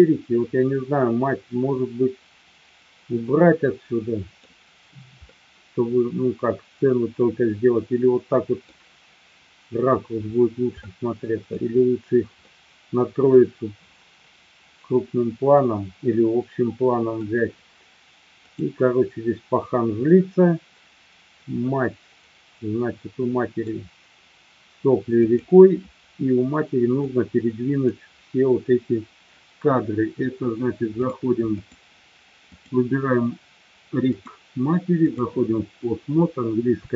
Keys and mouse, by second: 5.3-8.7 middle drag, 10.8-11.6 middle drag, 12.6 middle click, 15.7-17.2 middle drag, 20.1-22.1 drag, 22.1-23.7 middle drag, 25.2 click, 27.0-27.8 drag, 31.1 click, 31.7 click, 32.4 click, 34.1-35.2 drag.